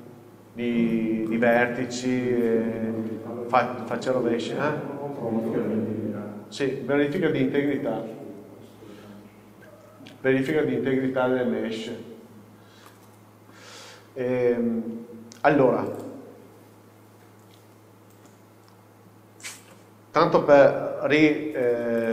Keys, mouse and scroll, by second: 1.7-16.0 middle drag, 3.6-4.4 scroll up 1, 4.4-5.1 scroll down 1, 5.1-6.8 scroll up 1, 6.8-9.8 scroll down 1, 9.8-10.9 scroll up 1, 10.9-13.0 scroll down 1, 13.8 scroll up 1, 16.0 click, 17.3-19.7 scroll down 1, 19.7 ctrl+o.